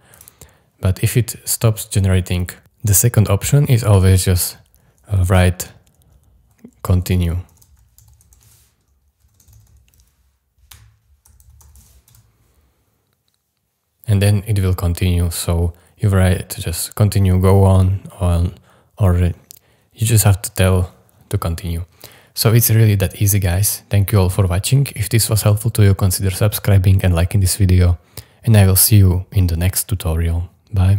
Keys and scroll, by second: 6.6-9.2 typing, 11.0-12.2 typing.